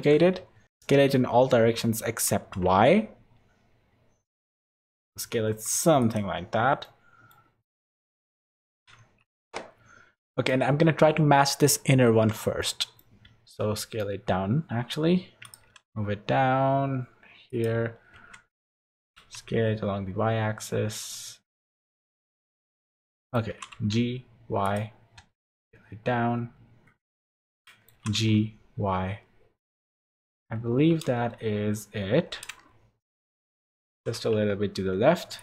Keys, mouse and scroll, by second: 0.0 alt+a, 0.0 3, 0.0 shift+d, 0.4 s, 6.8 middle click, 7.7 middle click, 8.8 z, 10.2 middle click, 12.6 middle click, 13.2 s, 15.6 g, 18.1 s, 22.8 middle click, 23.5 g, 25.1 s, 27.5 middle click, 27.9 g, 30.5 h, 31.4 alt+h, 32.3 h, 33.1 alt+h, 33.9 g.